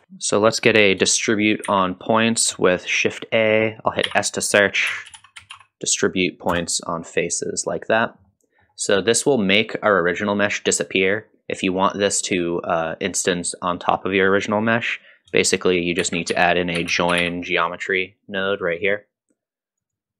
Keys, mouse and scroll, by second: 0.0 KP_Decimal, 1.7 shift+a, 8.3 middle click, 8.3 typing, 10.6-11.3 drag, 16.0 shift+a.